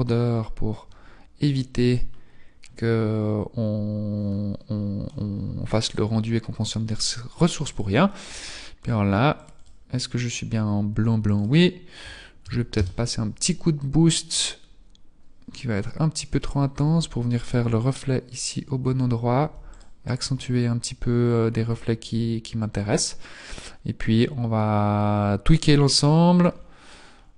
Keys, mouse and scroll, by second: 0.3-1.4 scroll up 3, 1.4-2.2 scroll up 4, 2.2-2.8 scroll up 1, 9.7 click, 13.0 click, 16.7 g, 19.4 g, 23.4-24.3 scroll down 4, 26.2-27.2 scroll down 6, 27.2-27.3 scroll down 3.